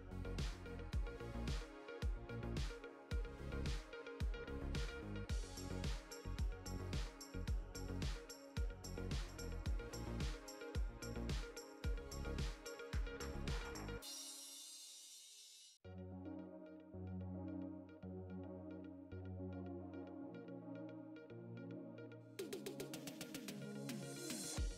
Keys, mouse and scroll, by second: 22.5 click, 23.3 click.